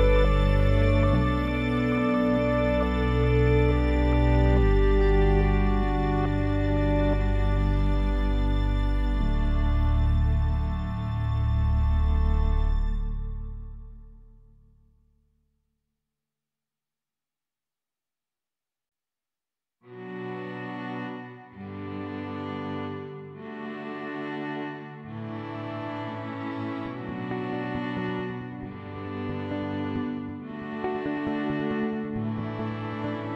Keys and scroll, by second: 3.0 ctrl+s.